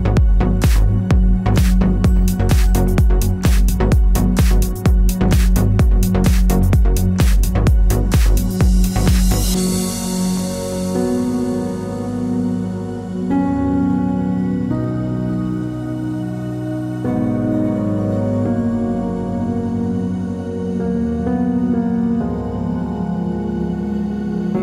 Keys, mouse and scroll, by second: 3.5 p, 5.4 click, 19.5 alt+e.